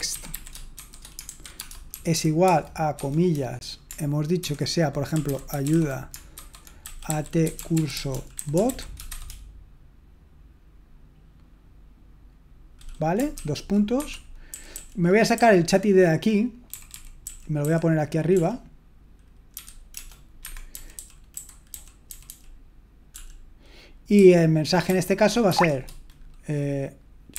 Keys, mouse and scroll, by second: 0.0-3.0 typing, 4.2-9.5 typing, 14.0 Escape, 14.0-15.3 typing, 17.0-23.1 typing, 20.4 Escape, 24.1-25.5 typing.